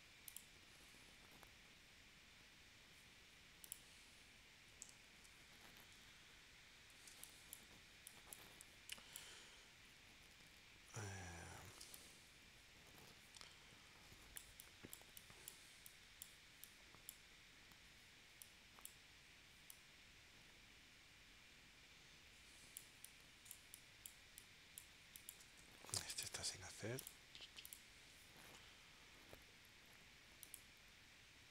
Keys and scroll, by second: 5.0 super+s, 7.1 space, 11.8 space, 25.9 space.